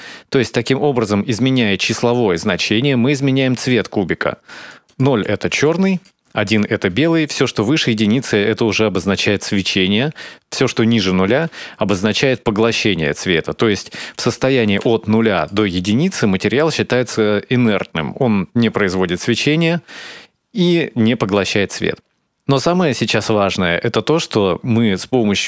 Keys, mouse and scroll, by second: 4.6 click, 5.7 click, 7.0 shift+click, 13.5 click, 15.1 click, 21.9-22.2 scroll down 1, 22.2-22.5 scroll up 2, 24.5 click.